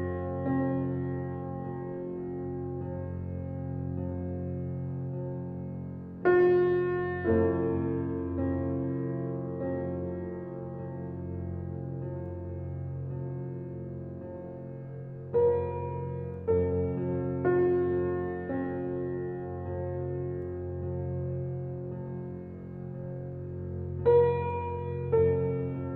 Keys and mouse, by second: 0.5 ctrl+alt+click, 1.0 ctrl+alt+click, 1.5 alt+click, 2.3 alt+click, 2.8-4.1 drag, 4.7 g, 5.2 x, 7.1 click, 7.4 typing, 8.2-10.6 drag, 10.4 Tab, 11.0-13.6 alt+drag, 11.9 typing, 14.1 click, 15.0-16.1 alt+drag, 15.3 typing, 16.5-20.1 drag, 20.0 alt+a, 20.6 ctrl+alt+click, 22.0 click, 22.9 typing, 23.4 shift+click, 24.5 ctrl+l, 25.6 Return.